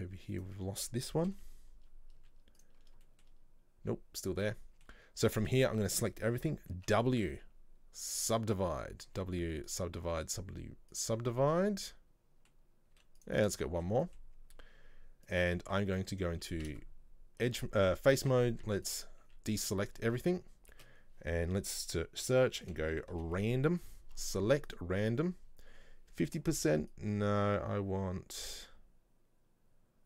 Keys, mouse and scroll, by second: 0.4 right click, 1.4 KP_7, 2.3 z, 3.1-4.2 shift+middle drag, 4.2-4.6 scroll down 2, 4.6 middle click, 5.5 a, 9.2 w, 11.5-13.1 middle drag, 13.1 w, 13.7-15.3 shift+middle drag, 15.3 click, 15.8 middle click, 16.7 a, 17.5 a, 19.0 right click, 19.3 a, 19.8 a, 20.9 space, 27.0-30.0 drag.